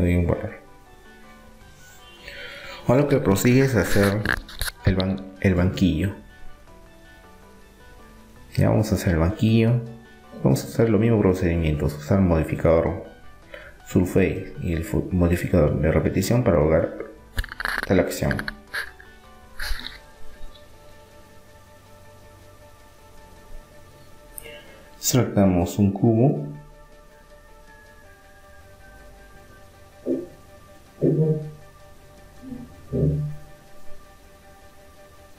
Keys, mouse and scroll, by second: 1.7-5.1 middle drag, 4.4-6.4 drag, 6.4 right click, 8.0-9.7 middle drag, 11.7 middle click, 13.1-14.7 drag, 14.7-16.7 middle drag, 16.7-21.8 middle drag, 23.1 click, 23.7-24.7 middle drag, 24.1 shift+a, 30.7-32.4 middle drag, 33.2 s.